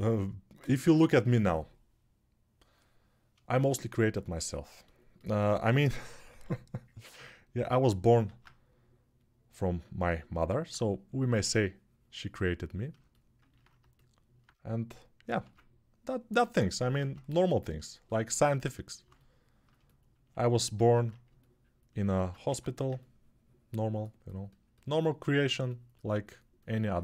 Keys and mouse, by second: 5.4 g, 5.9 ], 6.0 ], 6.2 ], 8.5 alt+q, 13.4-17.9 alt+middle drag, 15.2 ctrl+Tab, 17.4 ctrl+Tab, 17.9-27.0 alt+drag, 20.7 alt+q, 21.9 ctrl+z, 22.2 1.